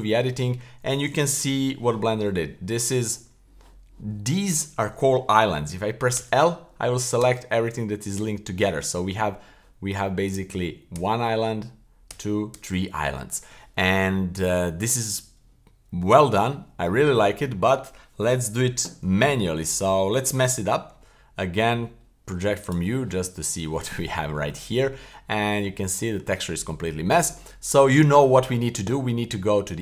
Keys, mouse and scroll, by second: 1.4 l, 6.2 l, 7.2 l, 8.2 l, 10.3-10.9 right drag, 10.9 l, 12.1 l, 12.5 l, 17.3 middle click, 20.6 u, 25.1-25.7 middle drag, 25.9 middle click, 26.4-27.3 middle drag, 28.0-28.8 scroll up 2, 28.8 Tab.